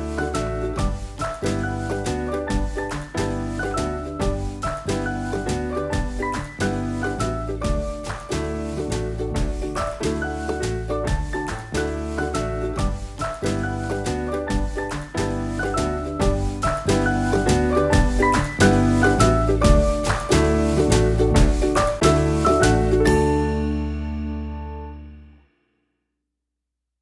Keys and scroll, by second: 4.2 super+s, 4.5 super+w, 10.1 super+=, 12.4 super+-.